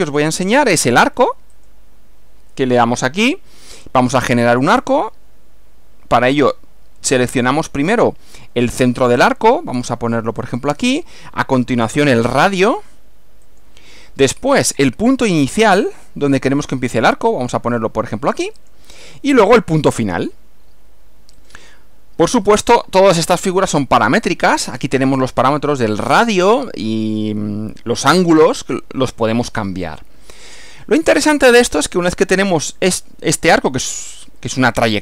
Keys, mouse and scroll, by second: 1.6 click, 3.3 scroll up 2, 10.5 click, 13.5 click, 18.6 click, 21.4 click, 22.3 click, 23.6 click, 30.4 click, 34.4-35.0 middle drag.